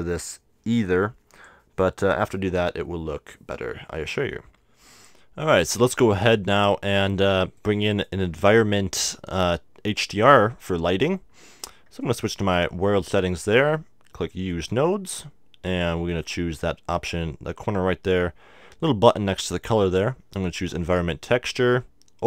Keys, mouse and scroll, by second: 4.9-6.0 drag, 6.0 middle click, 6.9-8.7 drag, 9.0-12.0 middle drag, 12.0-13.8 drag, 14.5-17.8 drag, 19.9-21.7 drag, 22.2 click.